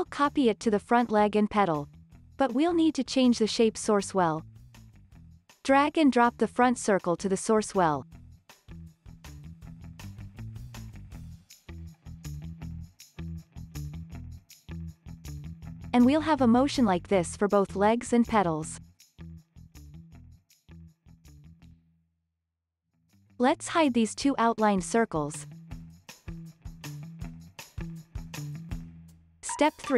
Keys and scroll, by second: 0.2 super+v, 2.0 super+v, 17.5 space, 21.7 space, 22.1 super+s, 25.9 super+s, 27.0 space.